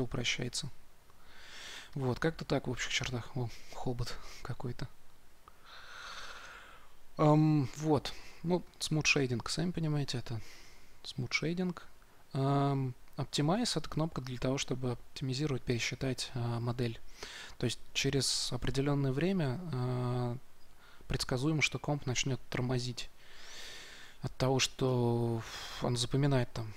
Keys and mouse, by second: 8.7-10.4 drag, 10.9-12.7 drag, 24.8-26.7 drag.